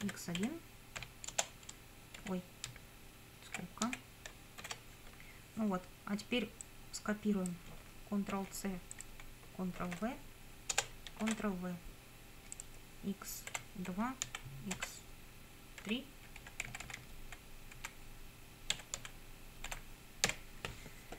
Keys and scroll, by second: 0.0 x, 0.4 1, 1.0 /, 1.3 Return, 2.2 Up, 2.7 Right, 4.6 shift+0, 8.3 ctrl+c, 9.8 ctrl+v, 10.7 Return, 11.3 ctrl+v, 13.5 Delete, 13.9 2, 14.3 Down, 14.7 Delete, 15.8 3, 16.4 Up, 16.7 Right, 17.7 Delete, 18.8 2, 19.0 Down, 19.7 Delete, 20.3 3.